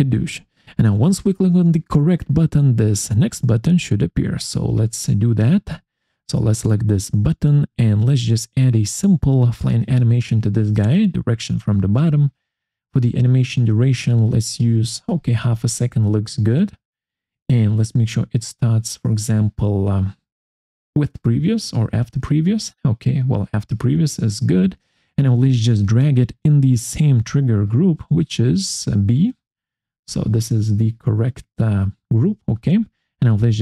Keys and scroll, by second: 4.6 Escape.